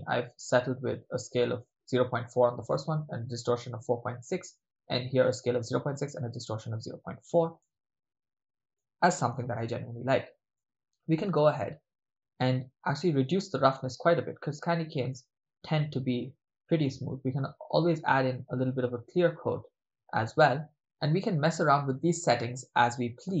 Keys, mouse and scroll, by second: 4.4 middle click, 7.6-8.8 middle drag, 10.6 middle click, 13.1-16.9 drag, 17.4-23.4 drag.